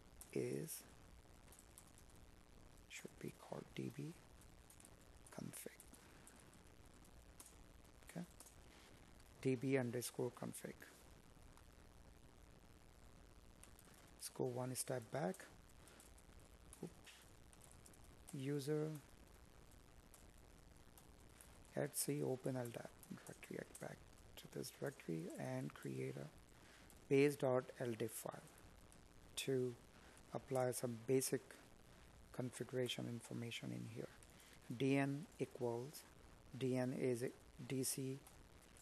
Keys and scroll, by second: 5.0 space, 7.1 space, 8.9 space, 16.4 space, 26.5 space, 35.3 Tab.